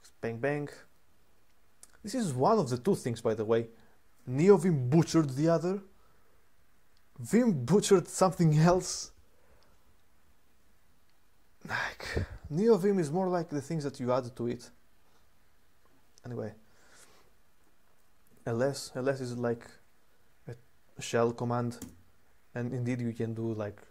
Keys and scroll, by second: 18.0 typing, 21.1 typing, 21.5 Return.